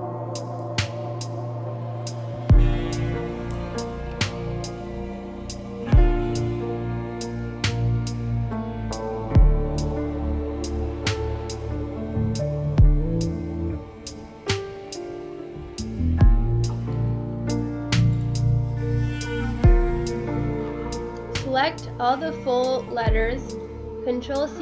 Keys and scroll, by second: 2.2 space, 2.5 space, 3.7 ctrl+f, 4.0 ctrl+f, 4.2 Right, 5.5 ctrl+f, 6.3 space, 9.1 ctrl+z, 10.2 a, 12.2 ctrl+z, 15.7 ctrl+z, 16.6 space, 18.9 Delete, 20.0 space, 20.5 Delete, 21.0 space, 24.0 c, 24.2 ctrl+b.